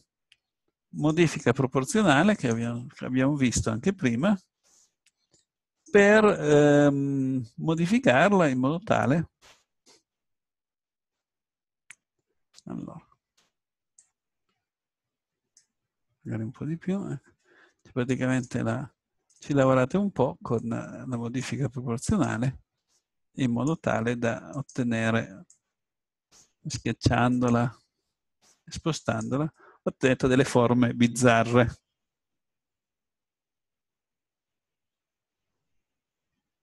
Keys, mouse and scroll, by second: 2.3-4.3 drag, 4.6-5.7 drag, 5.7 right click, 6.3-7.5 drag, 7.8-11.0 drag, 14.0-16.1 drag, 18.5-20.1 drag, 20.1 right click, 20.6-22.9 drag, 22.1 right click, 23.9 click, 26.6-28.4 drag, 29.1 click, 29.5-31.5 middle drag.